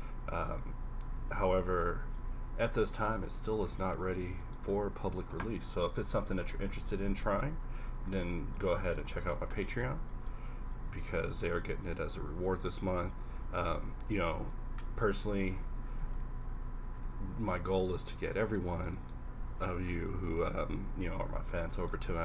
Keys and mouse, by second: 1.4 Tab, 2.2 Tab, 2.5 a, 3.1 Tab, 3.5 Tab, 4.9-6.8 typing, 8.1 Tab, 8.9 Tab, 10.4 Tab, 11.2 Tab, 11.7 ctrl+r, 13.4 g, 15.8 g, 17.0 ctrl+Tab, 19.4 e, 20.7 x, 21.5 z, 22.1 z.